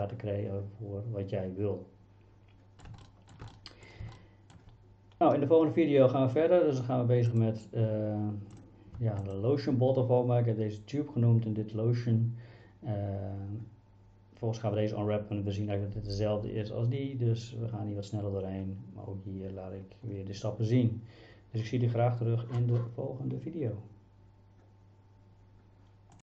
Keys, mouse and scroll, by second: 0.0-2.8 middle drag, 3.1 shift+middle drag, 3.6-3.9 middle drag, 4.2-4.5 shift+middle drag, 7.3 click, 9.3 shift+click.